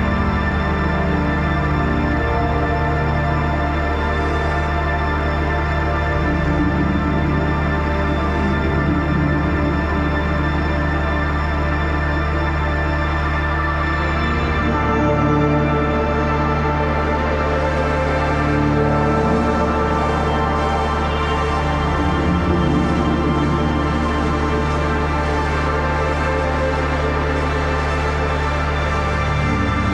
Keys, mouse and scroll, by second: 0.0-0.7 typing, 1.2 click, 2.7 click, 2.7 typing, 4.7 click, 7.0 click, 12.1 ctrl+=, 12.7 space, 12.8 click, 12.9 space, 14.0 right click, 14.6-17.2 drag, 20.5-22.9 alt+shift+drag, 22.9 ctrl+z, 23.1 click, 26.4 ctrl+shift+], 27.7 click, 28.1 shift+click.